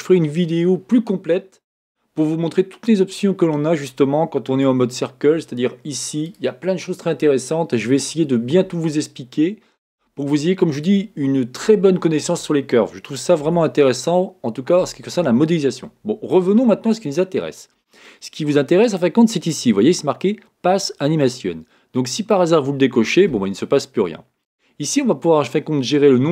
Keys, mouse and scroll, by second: 4.7 Tab, 6.3-9.3 drag, 13.4 Tab, 19.5 click, 22.2 click, 24.4 click.